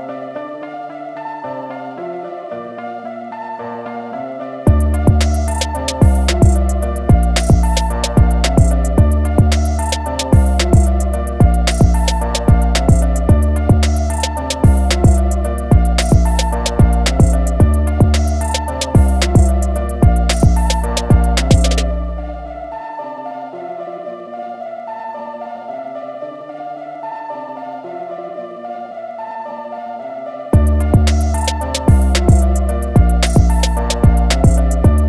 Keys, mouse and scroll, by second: 6.6 click, 7.9 a, 8.2 click, 16.0 a, 16.3 click, 23.6 a, 23.8 click, 30.9 BackSpace, 32.9 click, 33.2 BackSpace.